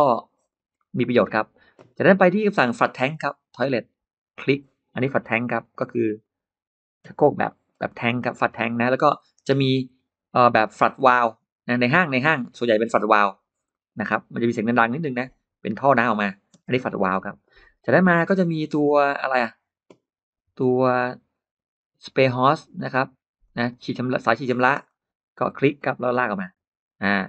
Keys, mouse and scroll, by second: 0.3-1.3 scroll down 4, 0.6 middle click, 2.9 click, 4.2 click, 5.4 click, 6.0 click, 6.9 space, 7.0-7.4 scroll up 2, 7.3 middle click, 7.5-7.8 scroll down 1, 8.0-8.3 scroll up 2, 8.1 middle click, 9.0-9.3 scroll down 2, 9.7-10.4 scroll down 4, 12.2 click, 13.1 click, 13.5-13.8 scroll up 3, 13.6 middle click, 15.0 click, 15.7 click, 16.4 space, 16.5 middle click, 16.6-17.3 scroll down 3, 16.8 middle click, 18.0-18.3 scroll up 1, 19.0-19.3 scroll up 2, 19.9-20.2 scroll up 2, 20.6-21.3 scroll down 4, 22.3 scroll up 2, 23.3 click, 23.9 click, 24.3 scroll up 2, 24.4 middle click, 24.6 scroll down 2, 24.7 scroll up 2, 25.6 click, 26.2 click.